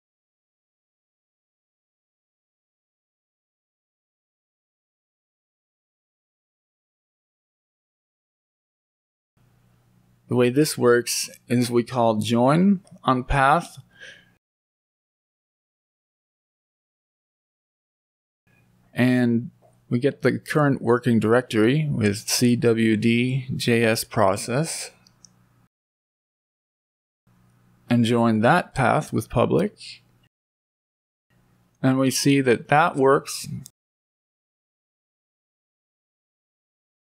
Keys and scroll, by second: 2.8 Down, 3.1 Down, 3.7 Down, 3.9 Down, 7.5 Down, 7.7 Down, 8.0 Down, 9.2 Up, 26.2 Right, 29.7 Right, 29.9 Right, 34.9 Up, 35.2 Right.